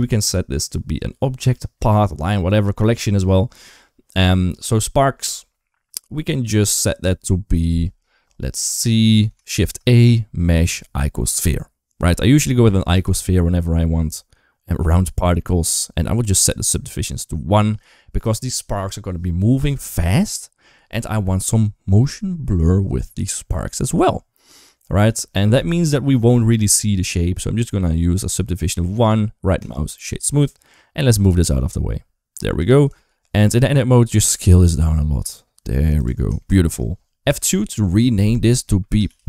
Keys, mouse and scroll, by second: 9.4 shift+a, 12.7 click, 16.1 click, 28.8 right click, 30.9 g, 32.8-33.1 shift+middle drag, 33.5 Tab, 34.1 s, 35.9 Tab, 36.3 shift+middle click, 37.1 F2.